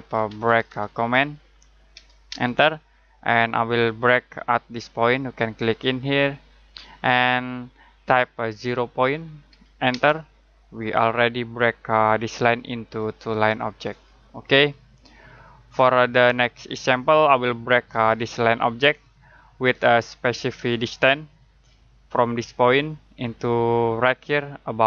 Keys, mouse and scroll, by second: 0.0-2.3 typing, 6.0 space, 6.2 click, 8.6 0, 9.9 space, 10.9 click, 15.6 Escape.